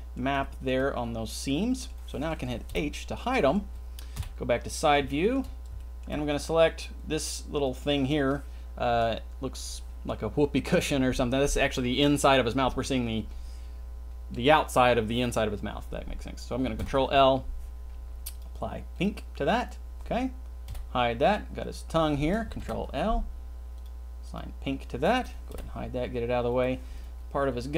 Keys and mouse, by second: 0.4 shift+middle click, 1.3 middle click, 2.7 h, 3.3 middle click, 4.1 KP_3, 4.8 shift+middle click, 5.7 shift+middle click, 16.8 ctrl+l, 18.3 click, 19.0 click, 20.7 h, 22.6 ctrl+l, 23.7 click, 24.3 click, 25.6 h, 26.5 click.